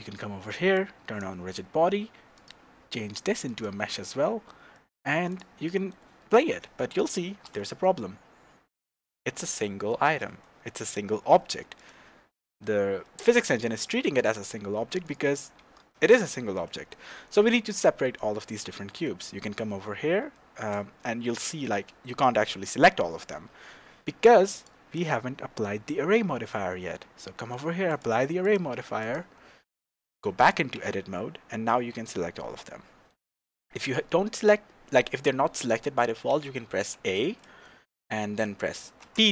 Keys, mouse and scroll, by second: 0.7 click, 2.3-4.1 drag, 4.1-5.3 middle drag, 5.3 click, 5.7-11.8 middle drag, 7.3 shift+space, 7.4 shift+space, 10.0 shift+space, 11.8-12.3 drag, 12.3-13.5 middle drag, 13.5 click, 15.0 click, 15.6 g, 16.6 Escape, 17.2-21.1 middle drag, 18.7 Tab, 20.9 scroll up 2, 21.7 click, 22.5-24.5 middle drag, 23.9 Tab, 24.5 click, 24.9 scroll up 1, 27.9-29.9 drag, 29.9-30.4 middle drag, 30.4 click, 30.7 Tab, 31.3 scroll down 2, 31.7 a, 32.0-35.3 middle drag, 36.9 a, 37.6 shift+middle click, 38.5-39.3 middle drag, 39.0 p.